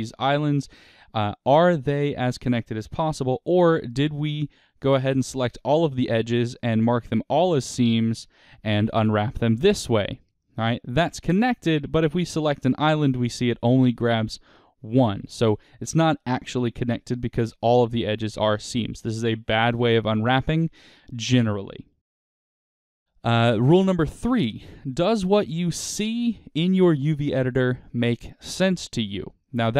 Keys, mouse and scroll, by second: 1.3 click, 3.1-5.4 middle drag, 3.6 a, 5.4-8.9 right drag, 7.9 a, 8.4 u, 12.0 click, 20.6-29.7 middle drag.